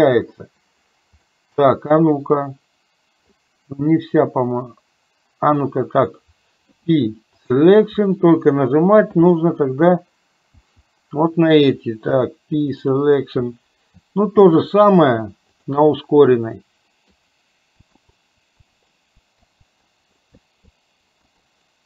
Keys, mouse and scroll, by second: 1.3 middle click, 6.7 p, 10.6 l, 12.1 p, 14.5 l, 15.2 p, 16.5 middle click, 17.8-19.8 typing, 21.2-21.8 typing.